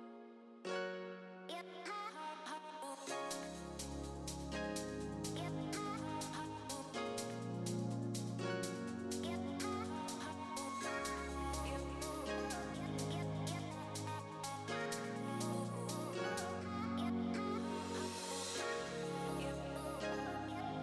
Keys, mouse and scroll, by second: 0.1 shift+middle click, 0.7 Tab, 0.9 middle click, 2.2 click, 2.8 3, 3.0 click, 4.3 middle click, 4.9 click, 6.2 2, 6.3 click, 9.7 middle click, 10.2 scroll up 2, 10.4 middle click, 10.7 shift+middle click, 11.0-11.4 scroll up 2, 11.3 middle click, 11.9 shift+middle click, 12.3 click, 14.4 middle click, 15.2 click, 17.2 alt+a, 17.3 Tab, 17.4-17.9 scroll down 4, 17.6 middle click, 18.4 alt+a, 18.5 scroll down 2, 18.6 middle click, 19.3 shift+middle click, 19.6 scroll down 1.